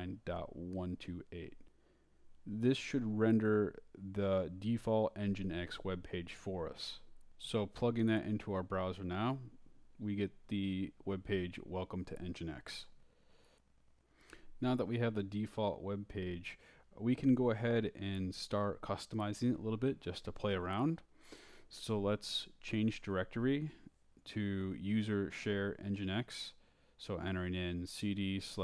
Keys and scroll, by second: 3.8 Right, 4.0 Left, 6.6 9, 7.5 Right, 9.3 Right, 10.7 Return, 20.4-21.9 typing, 26.4-28.6 typing.